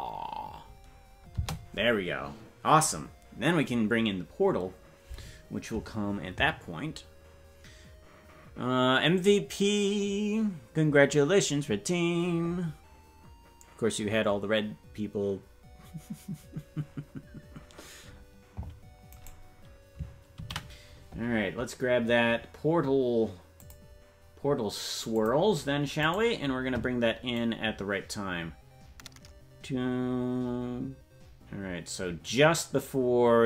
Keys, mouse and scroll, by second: 1.3 space, 19.2 right click, 23.1 ctrl+s, 23.6 click, 25.1 click, 26.2-27.4 right drag, 27.4-33.4 drag.